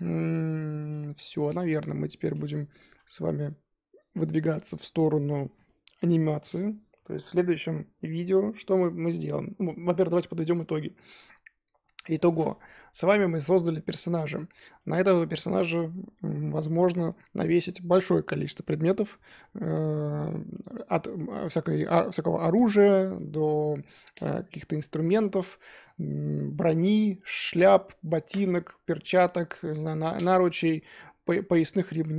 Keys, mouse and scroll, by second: 1.5-2.1 scroll up 4, 2.1-2.8 scroll down 3, 2.8 KP_1, 12.9-13.5 middle drag, 13.5-14.1 scroll down 1, 14.1-14.7 scroll up 3, 14.7-15.7 middle drag, 15.7-16.5 scroll down 3, 16.6 scroll up 1, 17.0-19.5 scroll down 1, 19.5-23.1 scroll up 2, 23.1-32.1 middle drag.